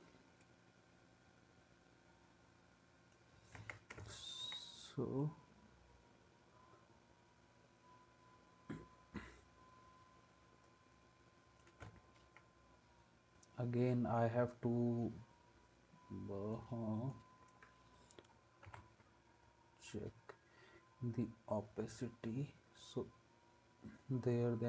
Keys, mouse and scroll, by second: 3.6 ctrl+s.